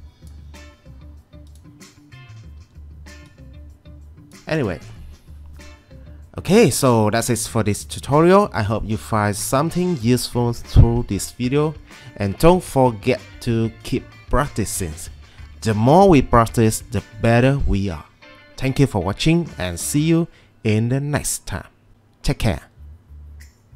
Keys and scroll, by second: 2.6 w.